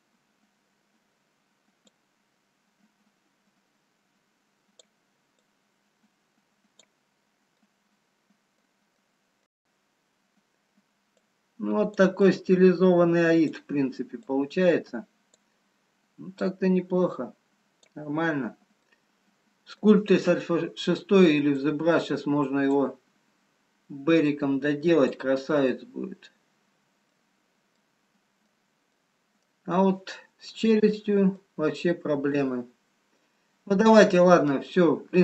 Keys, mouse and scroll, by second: 2.7 click, 5.8 click, 7.8 middle click, 9.2 middle click, 10.0-10.8 scroll up 2, 11.6 click, 11.6-12.1 scroll up 1, 12.4 click, 14.4 click, 18.8 click, 18.8 middle click, 22.3 click, 24.1 click, 25.6 middle click, 27.7 middle click, 31.6 middle click, 31.6-32.1 shift+scroll up 1, 32.1 shift+middle click, 33.8 middle click, 35.0-35.2 scroll down 2.